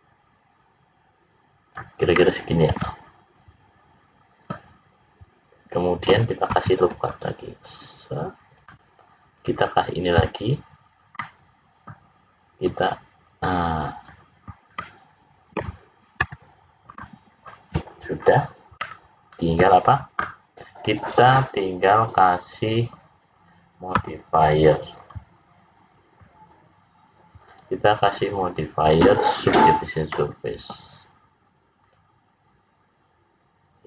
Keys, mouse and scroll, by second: 2.1 middle click, 6.5 ctrl+r, 9.3 click, 9.6 click, 11.1 middle click, 12.6 click, 14.3-14.9 scroll down 3, 14.8 middle click, 16.1 `, 17.3-17.8 scroll down 5, 18.2-18.8 scroll up 4, 18.8 middle click, 24.0 l, 24.9 click, 30.0 middle click, 31.7 click.